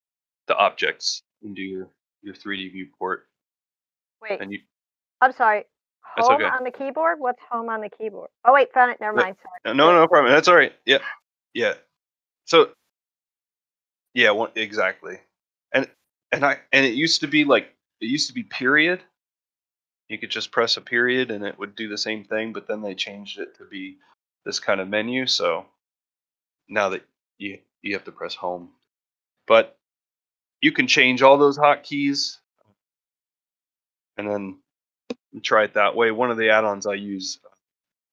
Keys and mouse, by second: 1.4-2.2 middle drag, 3.3-4.7 middle drag, 4.9-5.2 middle drag, 5.6-6.1 middle drag, 36.3 middle drag, 36.7 shift+middle click, 37.0 middle drag, 37.4 shift+middle click.